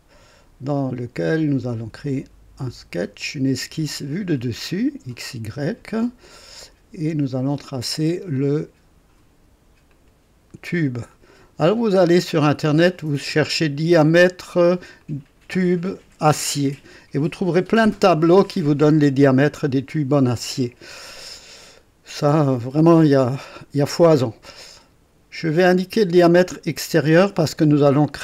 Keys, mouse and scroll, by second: 1.7 click, 3.2 click, 4.1 click, 7.5 click, 9.9 click, 11.1 click, 12.9 click, 15.0 click, 21.3 right click, 25.4 click.